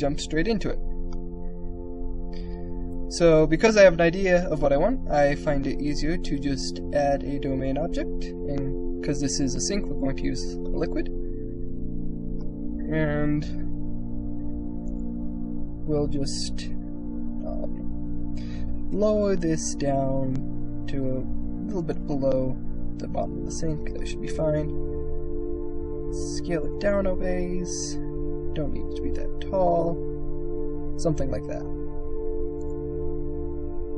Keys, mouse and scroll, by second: 0.9-2.2 drag, 2.6 KP_0, 6.4-9.1 drag, 9.6 click, 10.6 middle click, 10.9 click, 11.3 middle click, 14.7 click, 15.5 middle click, 15.9 middle click, 17.3 KP_1, 18.5 g, 21.9-23.2 middle drag, 23.2 click, 23.7 click, 24.2 click, 24.9 s, 26.6 click, 27.8 click, 28.1 s, 29.6-31.4 drag.